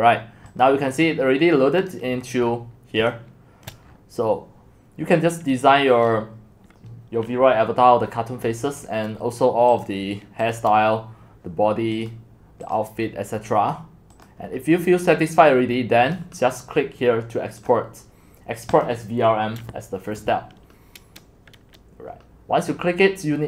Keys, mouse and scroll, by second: 0.0 middle click, 0.0-0.6 scroll down 7, 0.6-1.9 drag, 1.9 right click, 2.1 middle click, 2.1-3.6 scroll down 15, 3.6-6.4 scroll down 8, 6.4-7.0 scroll down 1, 7.0-8.4 scroll down 1, 8.4-9.4 scroll down 1, 9.8 click, 12.2-16.1 drag, 16.1-17.7 right drag, 17.7-23.4 drag.